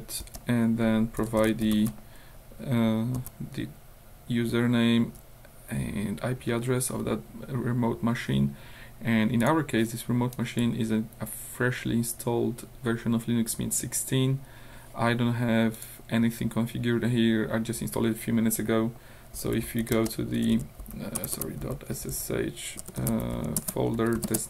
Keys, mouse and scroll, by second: 0.2-3.2 typing, 5.1 Up, 9.4 click, 10.4 click, 15.8 click, 19.4-24.0 typing, 24.3 Return.